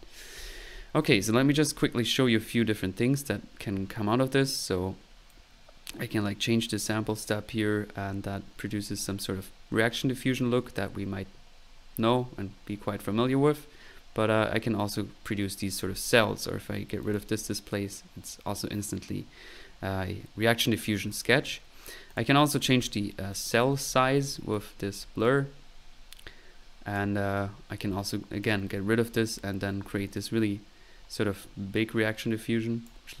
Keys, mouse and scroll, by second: 2.3-2.9 middle drag, 3.3-4.3 scroll up 2, 15.8 click, 17.1 click, 21.0 click, 22.1 click, 23.4 typing, 24.6-27.2 drag, 27.8-28.5 middle drag, 28.5-28.9 drag, 28.7 right drag, 29.1 click, 30.2-31.8 drag, 31.8 typing.